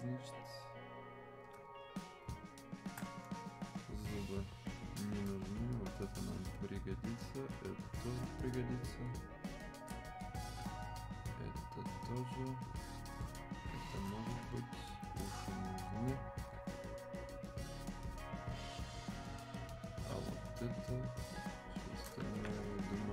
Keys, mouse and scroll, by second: 1.6 alt+click, 5.4 ctrl+click, 11.2 ctrl+shift+click, 17.7 shift+click.